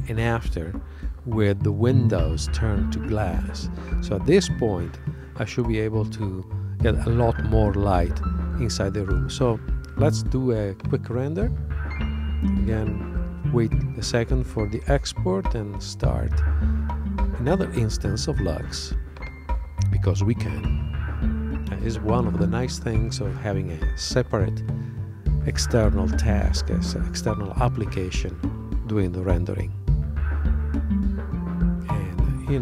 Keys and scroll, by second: 2.5 super+Tab.